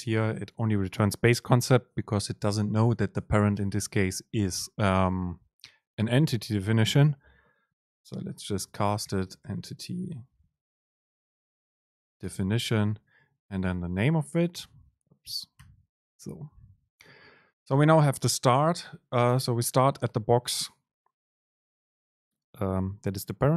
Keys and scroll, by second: 0.0 ctrl+shift+super+t, 11.3 super+space.